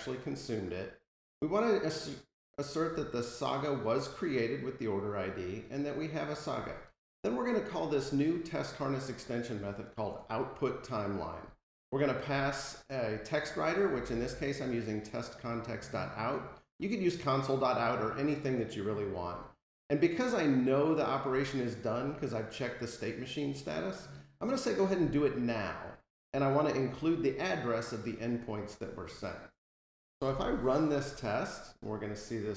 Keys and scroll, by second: 30.2 super+u.